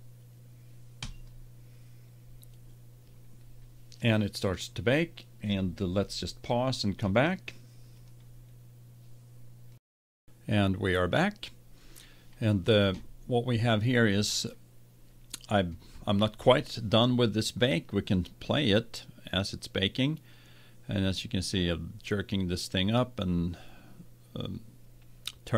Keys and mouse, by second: 1.0-2.9 drag, 18.1-20.1 drag.